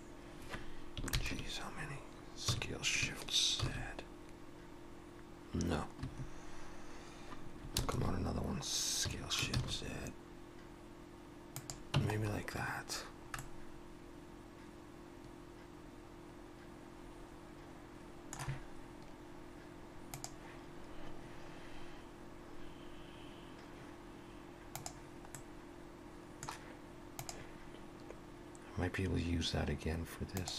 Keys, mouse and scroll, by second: 1.1 ctrl+KP_Add, 2.5 s, 7.8 ctrl+KP_Add, 9.1 s, 12.0 Tab, 12.2-12.9 scroll down 4, 13.1 scroll down 1, 13.4 middle click, 25.4 middle click.